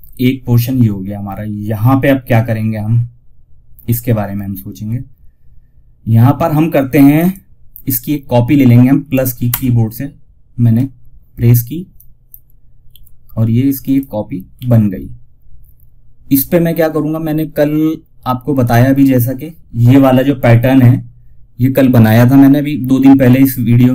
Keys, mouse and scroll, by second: 6.5 click, 11.2 click, 12.1 z, 13.0 click, 13.9 ctrl+z, 17.9 click, 20.0 typing.